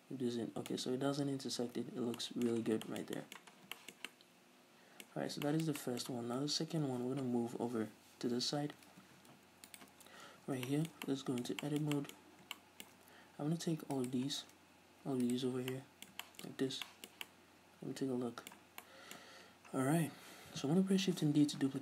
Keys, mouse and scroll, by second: 2.1 scroll down 2, 2.7 scroll down 2, 3.0-5.3 shift+middle drag, 3.7 scroll down 2, 5.3-5.6 scroll up 2, 5.6-7.3 shift+middle drag, 8.7 ctrl+s, 9.3 scroll up 1, 9.8 right click, 10.1 scroll up 1, 10.4 Tab, 10.8-13.3 shift+middle drag, 12.3-12.7 scroll up 2, 14.0 alt+right click, 14.4 scroll down 1, 14.9 scroll up 1, 15.3 alt+right click, 15.6 scroll down 2, 15.8 middle click, 16.6-18.8 middle drag, 16.6-17.0 scroll up 2, 18.8 scroll down 2, 18.9 middle click, 19.6-20.5 scroll down 2, 20.5-21.8 middle drag, 21.2 shift+d.